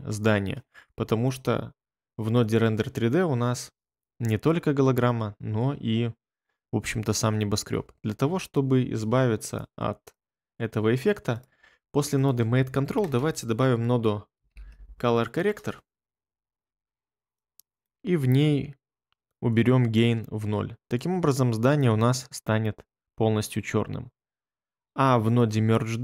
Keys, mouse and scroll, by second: 11.8 click, 13.0 space, 14.1-15.2 typing, 15.4 Return.